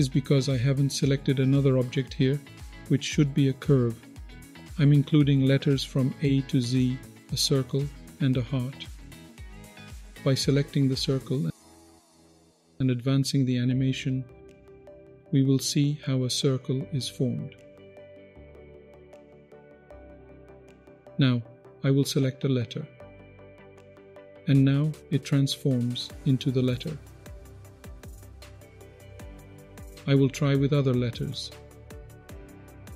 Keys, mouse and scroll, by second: 3.3-10.4 drag, 13.7-17.7 drag, 18.3-19.2 middle drag, 18.3-19.2 scroll up 1, 19.6 click, 20.6-22.0 drag, 23.6-27.7 drag, 27.9 click, 28.0 middle click, 28.8 click, 29.6 scroll down 1, 30.5-32.0 drag, 32.8-32.9 drag.